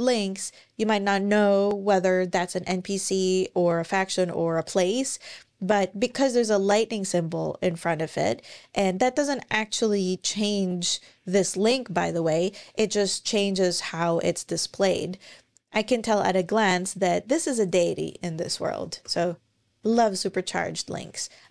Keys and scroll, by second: 3.7 super+End, 5.9 Escape, 18.8 super+BackSpace, 19.6 super+,.